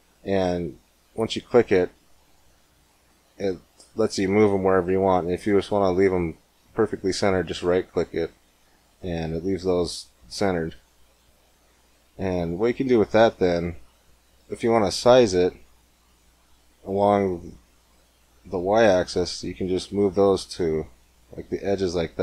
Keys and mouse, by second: 12.1-14.2 drag, 14.3-19.3 drag, 16.1 s.